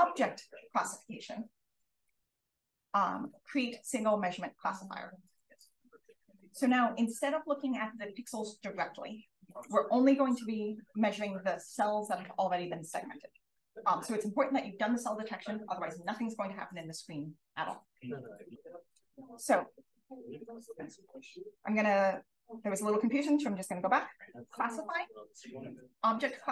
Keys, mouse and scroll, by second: 1.6-6.2 scroll up 1, 18.5-20.6 scroll up 1.